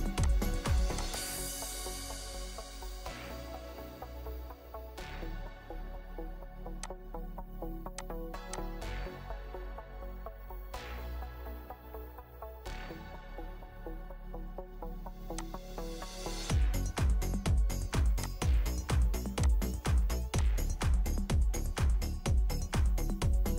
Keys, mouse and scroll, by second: 2.7 7, 4.1-4.4 typing, 4.7 Return, 9.6 Return, 10.2 typing, 10.4 Return, 11.0 scroll up 1, 12.3 scroll down 1, 14.4 Escape, 22.3 Escape.